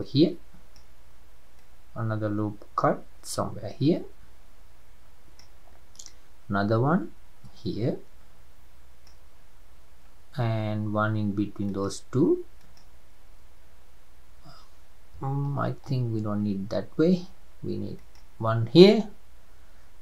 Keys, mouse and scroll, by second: 1.6-4.7 drag, 6.1-9.1 drag, 11.7-15.5 drag, 15.5 ctrl+z, 15.9 ctrl+z, 18.0-20.0 drag.